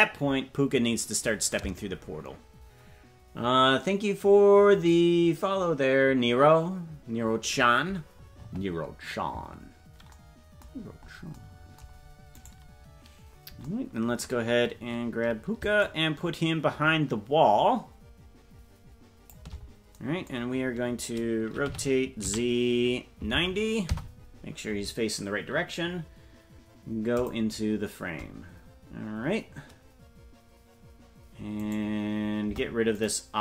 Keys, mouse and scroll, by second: 10.7-11.4 scroll down 8, 12.4 right click, 13.0-13.6 scroll down 2, 15.8-19.5 shift+drag, 21.6 r, 27.1 click, 31.6 right click, 32.4 Delete.